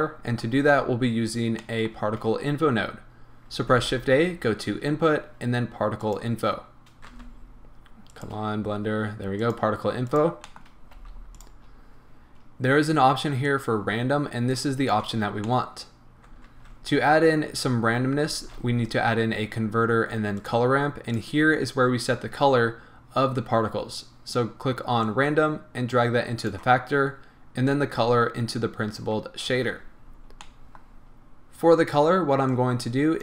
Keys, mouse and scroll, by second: 1.2-1.7 scroll down 1, 1.7 middle click, 3.6 shift+a, 10.2 click, 10.5 middle click, 10.9 g, 11.5 click, 11.7-13.5 scroll up 1, 13.5 click, 15.4 middle click, 16.5-21.2 middle drag, 16.5 shift+a, 21.2 click, 25.0 click, 27.7-28.8 drag, 29.8-30.5 scroll up 1, 30.5-32.5 middle drag, 30.9-32.5 scroll up 1, 32.5-33.2 drag.